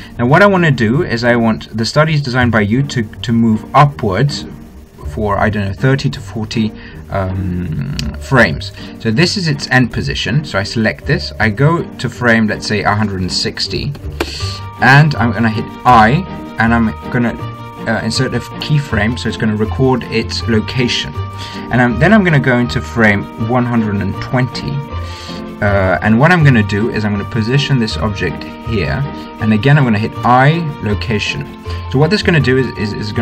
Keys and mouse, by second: 10.6-12.4 right drag, 13.4 right click, 13.8-15.2 drag, 16.6 i, 25.0-26.8 drag, 26.2 Right, 27.8-29.5 drag, 31.0 i.